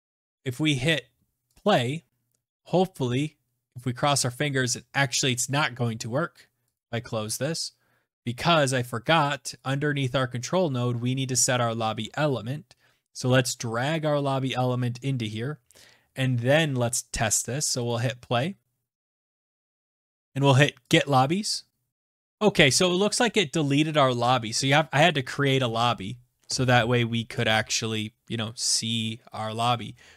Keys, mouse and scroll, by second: 1.2 click, 4.8 click, 5.5 click, 6.4 click, 8.2 click, 9.3 click, 14.1 click, 17.5 click, 19.5 click, 20.5 click, 21.9 click.